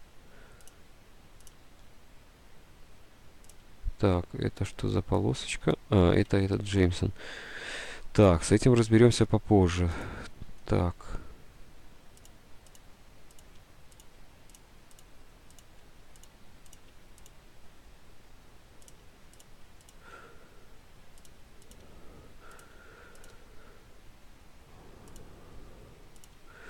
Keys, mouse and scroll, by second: 1.0 Delete, 1.7 Delete, 3.7 Delete, 6.6 ctrl+z, 6.9 Delete, 8.1 ctrl+z, 9.5 Delete, 10.3 Delete, 12.6 Delete, 13.0 Delete, 13.6 Delete, 14.4 Delete, 15.3 Delete, 16.0 Delete, 16.6 Delete, 17.0 Delete, 17.8 Delete, 18.5 Delete, 19.1 Delete, 19.8 Delete, 20.4 Delete, 21.4 Delete, 23.0 Delete, 23.5 Delete, 25.4 Delete, 26.5 Delete.